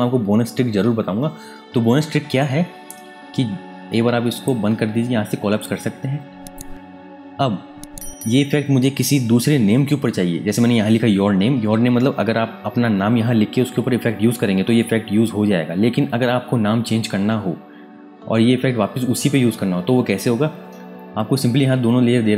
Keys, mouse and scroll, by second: 3.1-4.3 scroll up 1, 4.3 click.